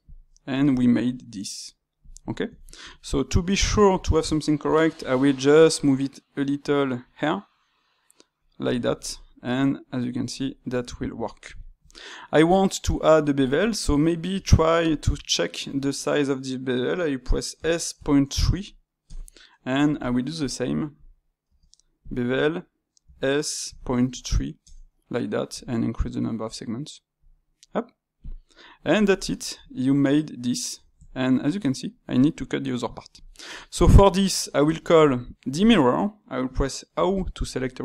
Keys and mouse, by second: 0.3-2.0 middle drag, 2.3-4.9 ctrl+shift+middle drag, 4.9 g, 8.8-13.3 ctrl+middle drag, 13.3 click, 14.3 space, 20.3 click, 20.9 click, 21.4 space, 28.4-34.6 middle drag, 34.6 space.